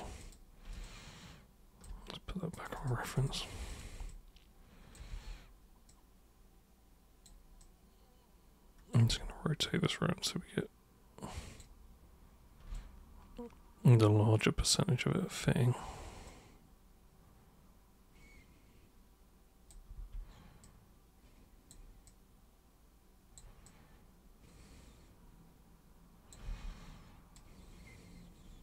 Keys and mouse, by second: 0.2 super+click, 0.8-1.8 alt+super+drag, 2.6 super+click, 2.8 super+click, 3.2 super+click, 3.7 super+click, 4.1-5.0 alt+super+drag, 5.1 super+e, 5.9 super+click, 7.6 super+click, 9.1 super+w, 9.9 super+click, 12.8-15.4 alt+super+drag, 16.3 super+click, 19.9 super+e, 20.6 super+click, 22.1 super+click, 23.7 super+click, 26.4 super+w, 27.4 super+click.